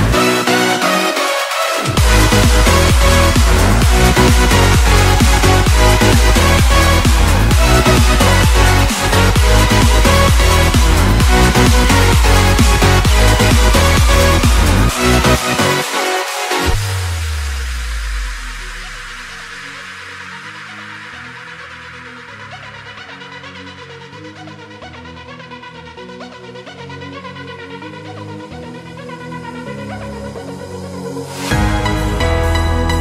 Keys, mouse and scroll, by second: 4.5 shift+click, 16.4-33.0 middle drag.